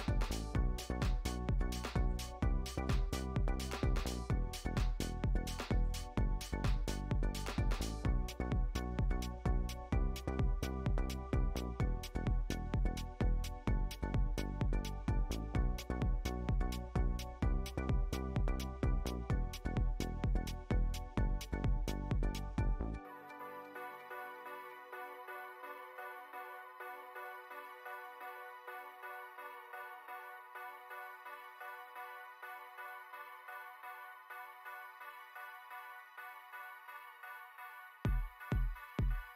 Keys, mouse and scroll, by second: 0.1 scroll up 1, 0.4 middle click, 0.8 click, 1.5-2.6 right drag, 2.6 click, 2.8 middle click, 3.3 scroll down 1, 3.4-5.4 middle drag, 5.4 scroll up 3, 5.6-6.3 middle drag, 6.3 Tab, 6.9 middle click, 7.1 Tab, 7.8 click, 8.2 Tab, 8.6 alt+click, 10.0 middle click, 10.2 Tab, 10.9 click, 11.2 click, 11.4 click, 13.0-13.5 drag, 13.9 scroll down 2, 14.1 click, 16.6-17.2 drag, 18.4 middle click, 18.8 scroll up 1, 18.9 middle click, 19.2 s, 21.0 click, 23.6-24.8 middle drag, 24.8 click, 26.0 click, 29.2-30.3 middle drag, 30.3 s, 31.2-31.8 middle drag, 31.8 click, 33.8-36.7 middle drag, 36.7 click, 37.1 scroll up 3, 37.2-37.7 middle drag, 37.7 click, 38.4 click, 38.9 click, 39.1-39.3 middle drag.